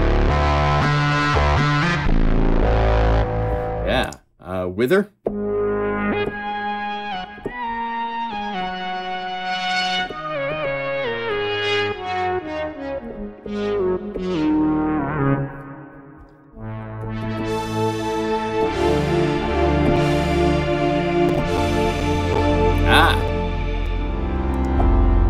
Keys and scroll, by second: 1.7 F4, 18.6 F4, 19.6 F4, 19.8 F4.